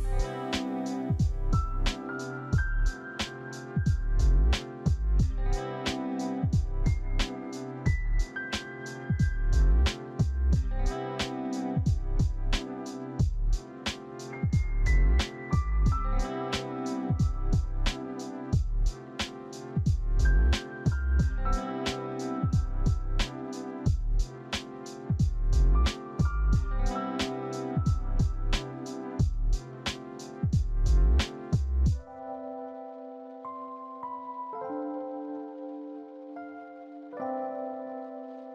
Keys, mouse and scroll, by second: 1.4 right click, 2.7 right click, 3.0 double click, 3.8 right click, 4.3 right click, 4.8 double click, 6.2 alt+shift+middle click, 7.1 alt+shift+middle click, 9.9 ctrl+d, 11.0 ctrl+d, 11.9 ctrl+d, 12.9 q, 13.6 a, 14.1 ctrl+d, 15.6 ctrl+d, 16.7 c, 17.6 double click, 22.8 middle click, 28.1 middle click, 28.2 middle click, 31.6 middle click.